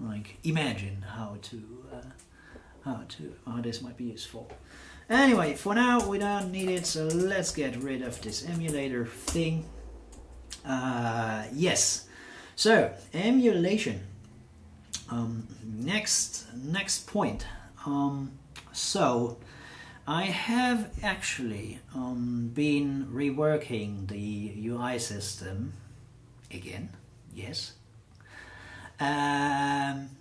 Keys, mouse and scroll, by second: 4.9-9.1 typing, 9.3 Return.